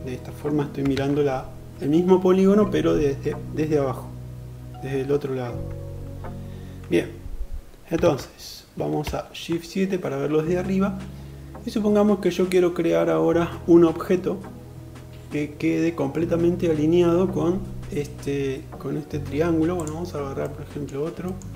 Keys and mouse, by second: 0.5 alt+z, 7.6 alt+z, 8.6 shift+KP_7, 20.1 middle click, 20.9 shift+middle click.